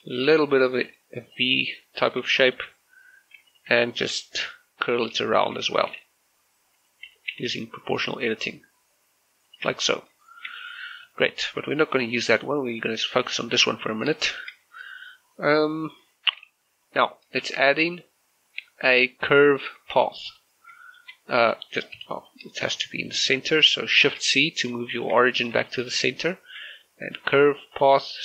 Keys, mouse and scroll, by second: 0.3 o, 1.0 click, 1.6 middle click, 3.6 alt+right click, 5.0 scroll down 1, 5.4 shift+middle click, 5.6 scroll up 1, 6.0 r, 6.8 right click, 7.1 o, 8.1 scroll down 1, 9.6 click, 9.7 Tab, 10.0 scroll down 1, 10.3 shift+middle click, 10.6 middle click, 12.4 scroll up 1, 12.8 right click, 14.0 scroll down 1, 14.3 shift+middle click, 14.6-16.1 scroll up 1, 16.5 shift+middle click, 17.5 shift+a, 20.4 click, 20.9 shift+middle click, 22.0 Delete, 22.3 click, 24.2 shift+c, 24.9 shift+middle click, 25.2-25.6 scroll up 2, 25.7 shift+middle click, 26.5 shift+a, 27.8 click.